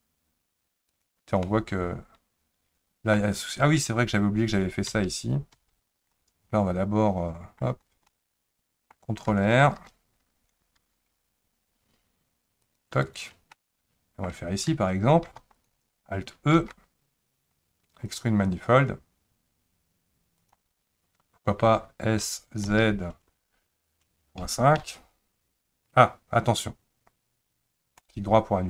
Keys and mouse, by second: 1.4-3.2 middle drag, 4.9 ctrl+z, 5.5 ctrl+z, 7.2 middle click, 8.1 middle click, 9.8 ctrl+e, 10.8 ctrl+r, 13.6 middle click, 15.3 3, 15.5 click, 16.5 alt+e, 22.3 s.